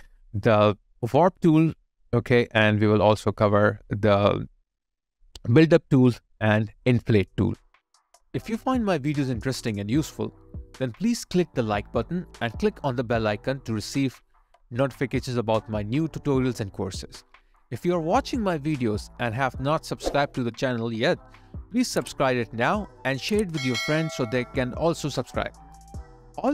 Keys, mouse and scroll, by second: 3.3 alt+click, 6.3 alt+right click, 6.6 alt+click, 7.4 alt+middle click, 7.8 alt+click, 8.3 alt+right click, 8.6 alt+click, 9.5 space, 13.3 alt+click, 18.3 alt+click, 19.3 Tab, 26.4 ctrl+z.